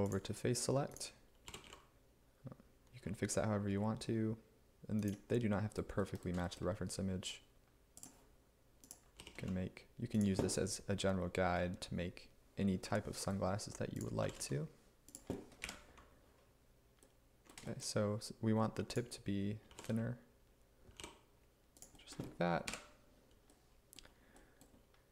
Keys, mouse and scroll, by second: 1.5 g, 3.8 x, 9.3 g, 9.5 z, 11.6 1, 14.3 g, 14.4 z, 15.7 1, 19.7 g, 21.0 y, 22.7 1.